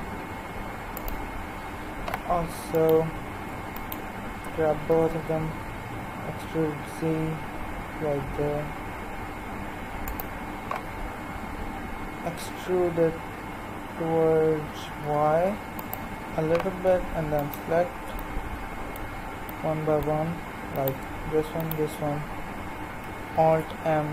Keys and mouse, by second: 2.7-5.5 right drag, 4.9 e, 8.4-10.8 right drag, 12.1 e, 17.4-23.3 right drag, 23.3 alt+m.